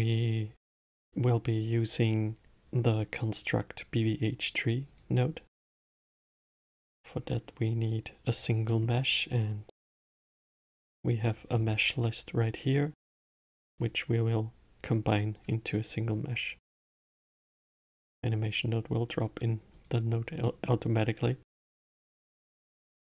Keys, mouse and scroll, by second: 9.0-12.1 middle drag, 12.3 click, 14.2 click, 16.5 click, 17.5-20.1 middle drag, 20.1 click, 20.8-23.1 middle drag.